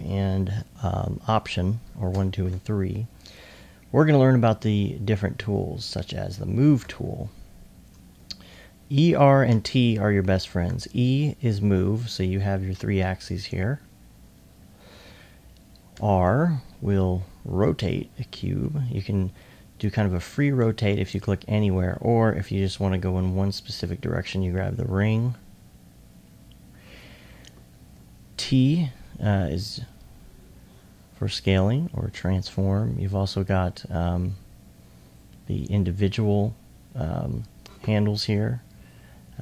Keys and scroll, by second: 6.9 e, 8.1-8.8 typing, 10.7 e, 16.0 r, 16.2 r, 27.9 t.